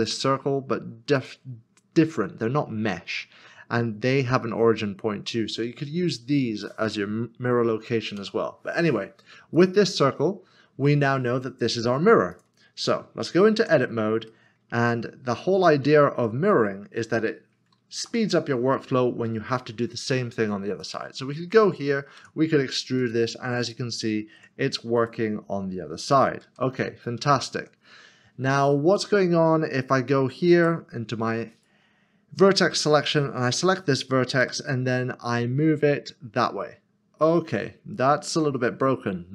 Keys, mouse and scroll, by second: 8.2 Delete, 9.6 click, 12.3 click, 13.6 Tab, 14.3 middle click, 15.1 scroll up 1, 15.7 shift+middle click, 16.7 middle click, 18.0 3, 20.8 click, 23.0 e, 25.0 click, 26.4 ctrl+z, 28.9 ctrl+z, 29.1 middle click, 30.6 1, 31.5 click.